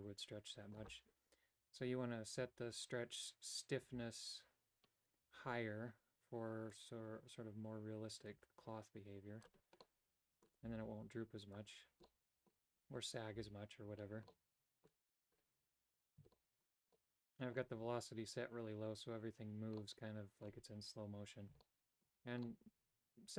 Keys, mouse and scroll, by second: 6.8-9.6 drag, 10.0 middle click, 10.8 g, 12.2 middle click, 13.5 a, 14.4 middle click, 16.5 shift+middle click, 17.0 middle click, 20.0 middle click, 21.8 shift+middle click, 22.6-23.3 middle drag.